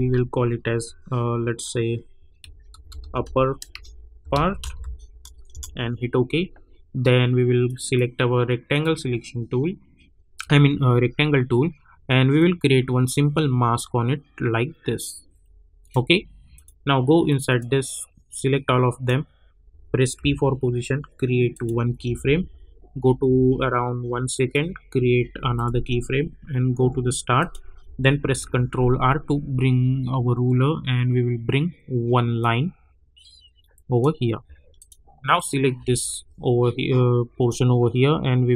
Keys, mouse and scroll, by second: 2.1-5.3 typing, 5.5 Return, 10.3 click, 12.3-20.1 drag, 20.1 p, 21.5 click, 21.9 =, 22.1 =, 22.4 =, 23.3 -, 24.3 click, 26.8 j, 27.3 click, 28.3 ctrl+r, 32.4-34.7 drag, 35.7 v, 37.4-38.5 drag.